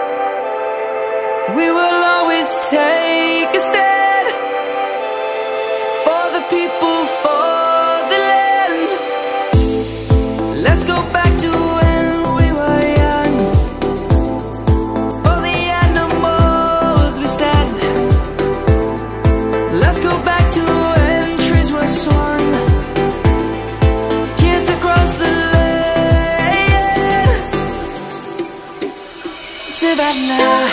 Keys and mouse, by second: 1.6 shift+click, 3.0 ctrl+-, 3.8 middle click, 10.2 Tab, 11.4 Tab, 12.5 click, 12.9 middle click, 15.1 1, 16.3 click, 20.0 Tab, 21.4 Tab, 21.9 click, 30.6 Delete.